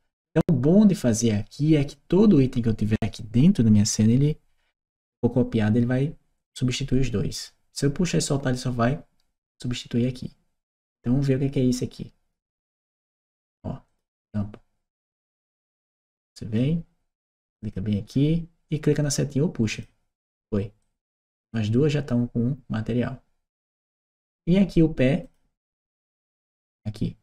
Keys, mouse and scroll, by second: 11.6 click, 12.9 click, 13.7 click, 15.0-16.4 drag, 17.5 click, 19.6 click, 20.7-21.3 drag, 23.5-24.2 drag, 25.1 click, 26.5 click.